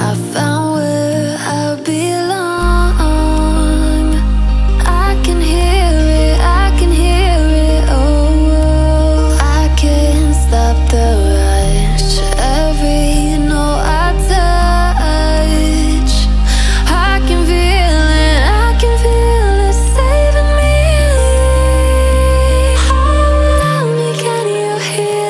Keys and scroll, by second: 9.7 ctrl+z, 19.2 ctrl+z.